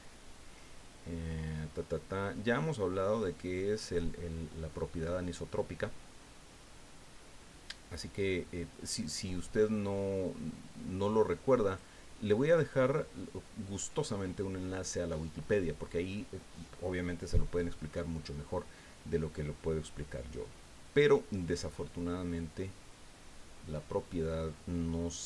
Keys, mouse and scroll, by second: 0.8-1.1 scroll up 2, 3.8 click, 9.3-12.0 drag, 21.6 click, 22.4 scroll down 2, 23.3-23.6 scroll up 2.